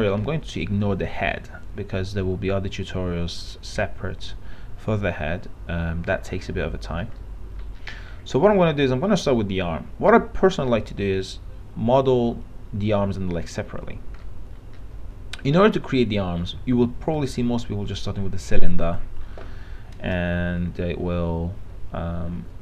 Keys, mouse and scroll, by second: 7.4 middle click, 7.8-14.4 scroll up 1, 14.4 middle click, 14.8-17.4 scroll up 1, 17.4 click, 20.5 click, 20.6 r.